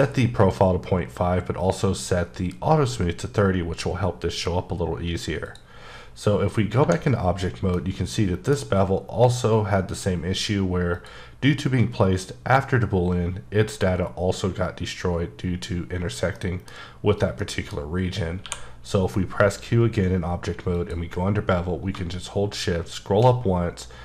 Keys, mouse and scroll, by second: 5.4 click, 7.7 middle click, 10.9 click, 16.3 middle click, 17.4 middle click, 18.4 q, 20.7 click, 22.9-24.0 shift+scroll up 2.